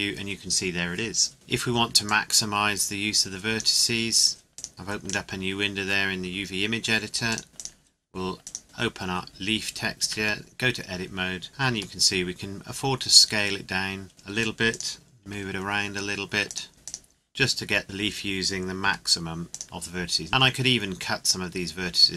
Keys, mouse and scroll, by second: 2.1 click, 5.7 scroll up 1, 6.2 scroll down 1, 7.3 click, 8.6-9.1 scroll down 1, 9.1 scroll up 1, 11.5 Tab, 11.7 s, 14.7 click, 15.5 g, 16.5 click, 16.7 s, 16.8 click, 18.8 g, 19.5 click, 22.0 Tab.